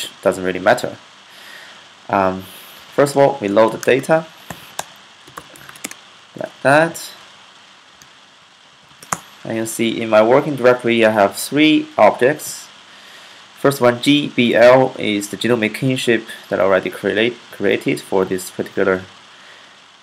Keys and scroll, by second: 2.2-6.0 typing, 7.5-8.7 typing.